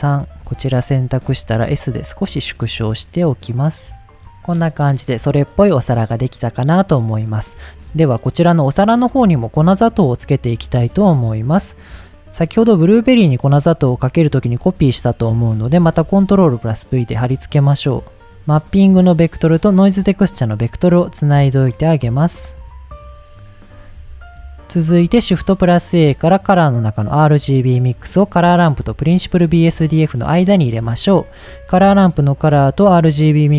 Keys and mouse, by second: 4.1 click, 4.6 middle click, 5.3 middle click, 8.4 middle click, 9.1 middle click, 15.0 middle click, 15.8 ctrl+v, 17.0-18.2 drag, 19.0-20.2 drag, 20.6-21.0 drag, 21.2-21.7 drag, 22.1 click, 22.6-23.4 drag, 23.6 middle click, 25.2 shift+a, 29.3 click, 30.2 click, 30.7 drag, 31.4-32.8 drag.